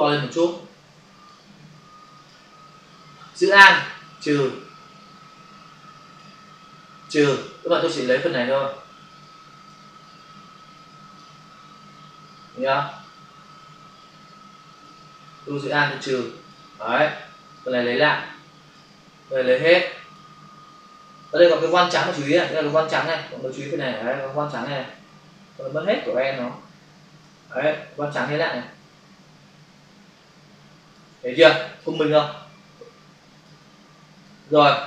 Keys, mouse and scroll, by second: 1.3 click, 3.7 alt+click, 7.0 alt+click, 9.2 click, 10.0 click, 12.8 click, 15.8 alt+click, 17.5 click, 19.5 click, 21.3 click, 22.7 alt+click, 28.1 click, 31.7 click, 32.8 click, 34.0 click.